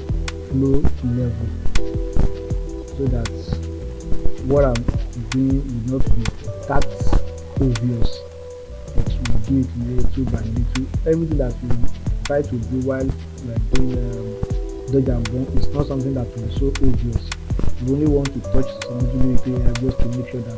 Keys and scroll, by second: 4.8 ctrl+z, 7.1 ctrl+z, 15.3 ].